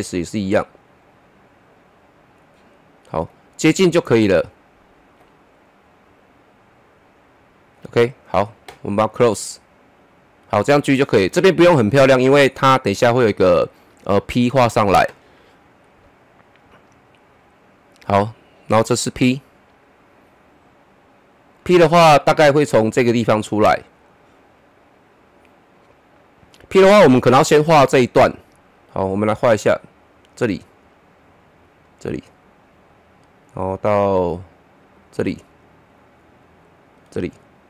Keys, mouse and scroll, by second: 0.0 middle click, 1.0-8.2 drag, 10.4 click, 16.1 click, 19.8-21.0 scroll down 1, 22.8 scroll up 1, 30.3-34.4 drag, 35.0-37.6 drag.